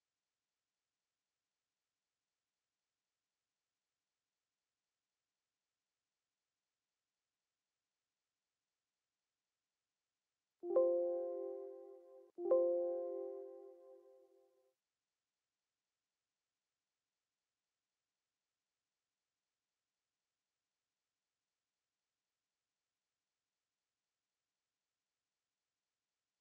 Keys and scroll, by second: 10.7 ctrl+t, 15.7 ctrl+t.